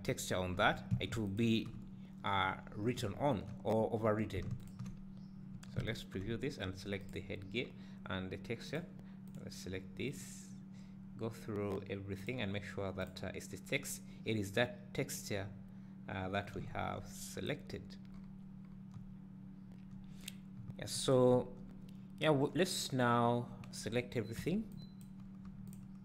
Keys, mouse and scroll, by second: 1.3 ctrl+shift+click, 3.7 `, 4.7 ctrl+shift+click, 5.9 click, 7.0 click, 8.7 click, 9.3 click, 12.2-12.7 drag, 13.0 click, 16.6 `, 18.2-18.7 scroll up 2, 18.3 middle click, 18.7-19.0 scroll down 2, 19.0 `, 20.4-20.7 scroll down 2, 20.7 `, 23.9-24.4 scroll down 1, 25.1 b, 25.8 shift+click.